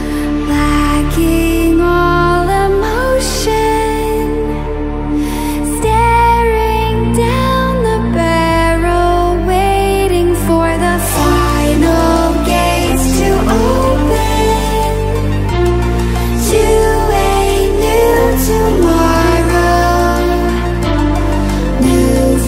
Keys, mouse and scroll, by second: 3.4-4.5 drag, 5.5 click, 7.7-10.9 drag, 15.0 ctrl+alt+scroll down 1, 15.8 ctrl+alt+scroll up 1, 18.2 space, 18.4 click, 18.7-19.0 space, 20.4 click.